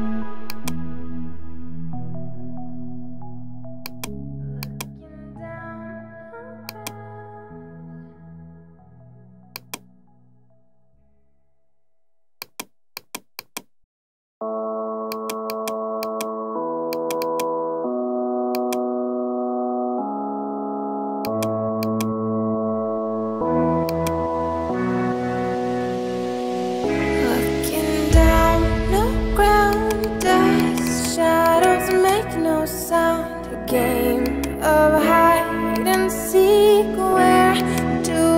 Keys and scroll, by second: 8.4 ctrl+z, 19.4 Right, 20.2 Left, 21.5 space, 22.9 ctrl+t, 25.3 Return, 26.5 ctrl+0.